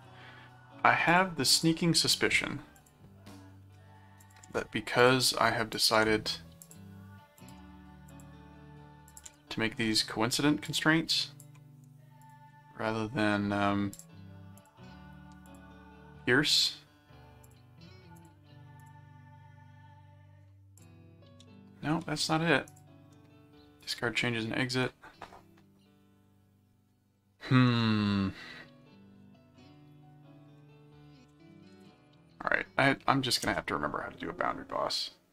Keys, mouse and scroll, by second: 1.1 click, 2.8 click, 4.2 click, 5.0 click, 5.7 click, 6.6 click, 7.3 click, 8.1 click, 9.1 click, 10.6 click, 12.2 ctrl+click, 13.9 click, 14.6 ctrl+click, 15.5 ctrl+click, 17.4 click, 18.2 ctrl+click, 18.8 ctrl+click, 20.8 click, 21.4 ctrl+z, 22.7 click, 23.8 click, 31.1-32.6 typing, 33.4 Return.